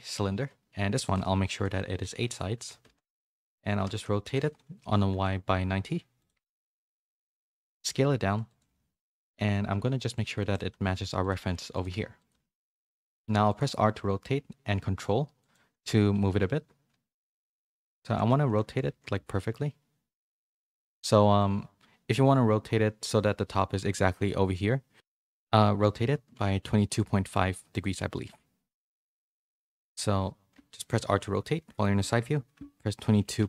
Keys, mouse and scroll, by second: 1.0-2.9 drag, 6.8 KP_3, 7.8 s, 8.6 g, 9.7-12.3 typing, 10.3 shift+middle click, 13.6 r, 16.1 g, 18.1 ctrl+z, 18.8 r, 27.2 click, 31.0 r.